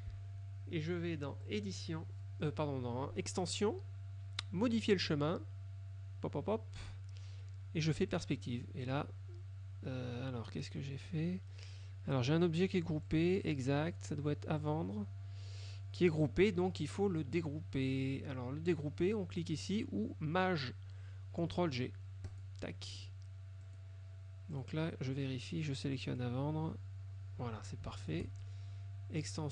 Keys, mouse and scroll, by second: 1.6 click, 8.2 click, 13.2 click, 14.7 click, 22.4 click, 23.8 click, 24.6 click, 26.1 click, 28.1 shift+click, 29.4 click.